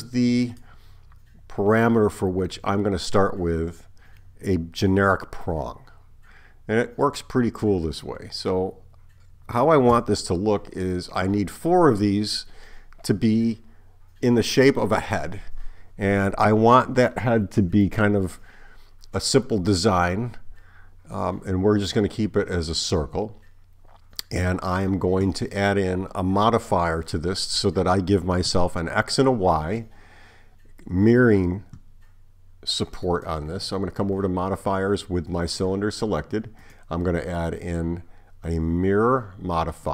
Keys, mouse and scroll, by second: 10.0 Tab, 33.1 click, 36.6 click.